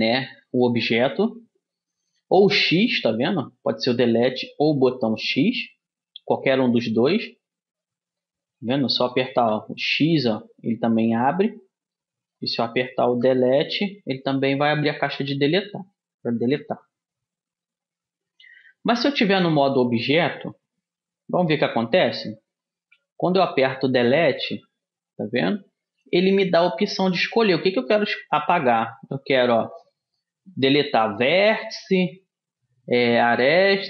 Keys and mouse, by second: 7.9 middle click, 9.5 x, 10.6-12.0 middle drag, 13.2 Delete, 18.9 Tab, 21.1 a, 23.1 Delete.